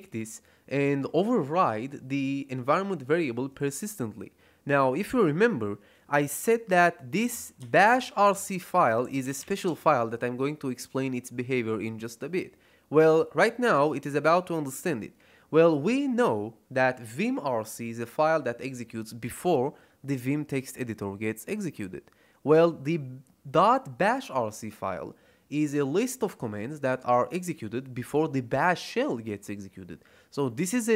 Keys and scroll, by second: 6.9-10.1 typing.